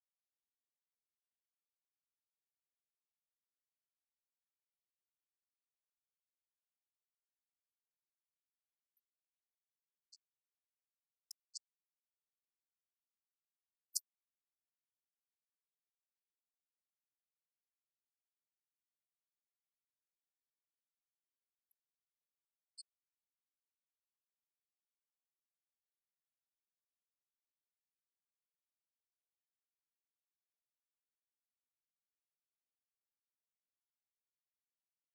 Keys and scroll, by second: 1.7 F12, 13.1 space, 16.6 1.